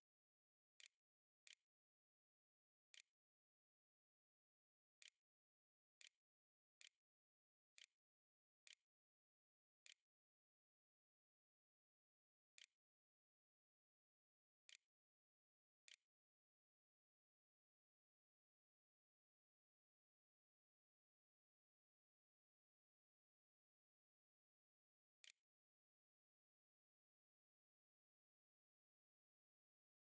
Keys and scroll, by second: 0.0-9.9 typing, 11.2-14.4 typing, 15.0 ctrl+a, 15.4 ctrl+s, 16.1 a, 23.9-26.2 typing.